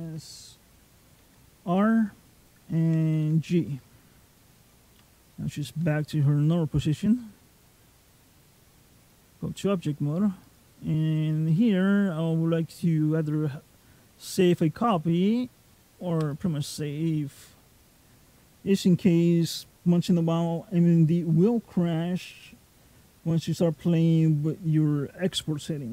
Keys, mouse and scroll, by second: 1.1 alt+r, 3.0 alt+g, 5.1 middle click, 7.9 click, 10.3 click, 23.6 click.